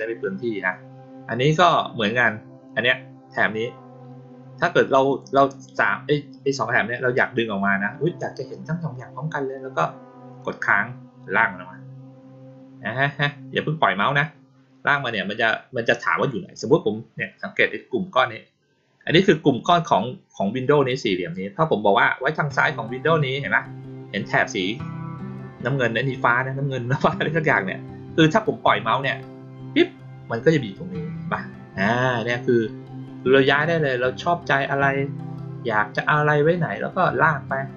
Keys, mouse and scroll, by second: 5.0 click, 10.3-29.7 drag.